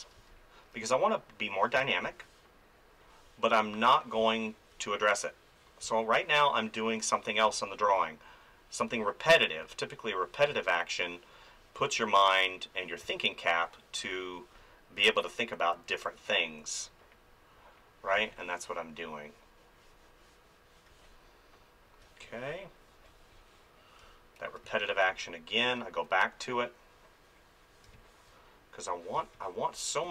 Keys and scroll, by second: 1.7 space, 4.2 space, 5.8 space, 7.5 space, 10.5 space, 15.7 ], 18.1 space, 20.9 space, 23.1 space, 26.0 [, 27.9 space.